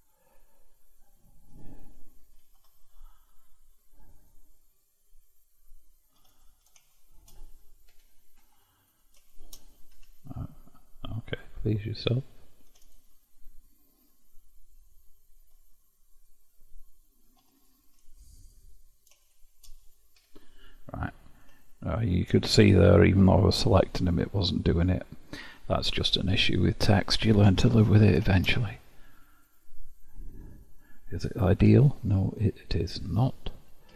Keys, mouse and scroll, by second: 2.5 ctrl+x, 4.3-6.5 drag, 6.9 shift+click, 8.0 f, 9.0 drag, 9.4 shift+click, 10.1 f, 11.3 click, 12.8 2, 12.9 click, 14.7 ctrl+x, 16.3 click, 17.5 3, 17.7 click, 18.5 click, 19.3 shift+click, 20.2 f, 21.1-21.7 scroll down 1, 21.7-23.6 shift+middle drag, 23.6-25.1 scroll up 3, 25.9-26.9 scroll down 1, 27.7 Tab, 28.7-29.5 scroll down 9, 29.5 click, 30.4 KP_Decimal, 31.1-31.7 scroll up 1, 31.7 Tab, 32.5-33.0 scroll up 2.